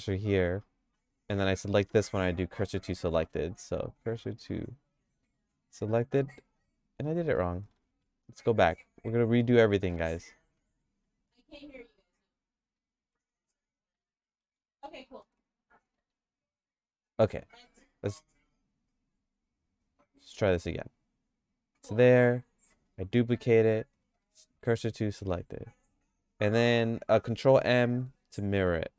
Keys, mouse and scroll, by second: 1.1 Tab, 1.4 click, 3.2 shift+s, 7.9 ctrl+z, 8.2 ctrl+z, 8.6 ctrl+z, 9.0 ctrl+z, 9.4 ctrl+z, 10.1 ctrl+z, 10.4 ctrl+z, 10.7 ctrl+z, 12.0 g, 13.3 ctrl+z, 13.5 ctrl+z, 14.0 ctrl+z, 14.6 ctrl+z, 15.1 ctrl+z, 16.0 g, 20.7 click, 22.1 click, 23.0 shift+d, 24.3 shift+s, 27.6 ctrl+m.